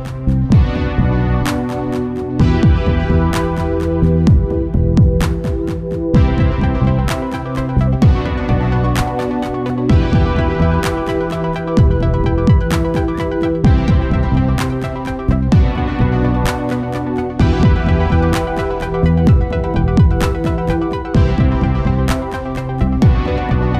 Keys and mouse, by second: 0.9-2.9 drag, 3.7-5.3 drag, 8.1-9.7 drag, 15.0-16.7 drag.